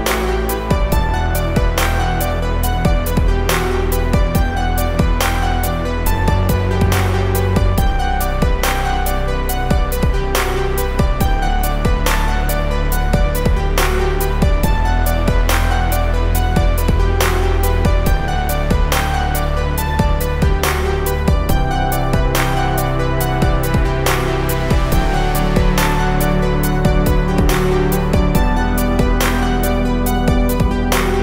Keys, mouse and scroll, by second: 0.7 v, 1.1 click, 1.5 space, 1.6 click, 2.0 space, 2.7 click, 2.7-6.5 drag, 8.9 ctrl+c, 9.3 ctrl+f, 10.5-16.4 drag, 16.4-18.3 alt+shift+drag, 22.5 click, 28.4-31.2 drag.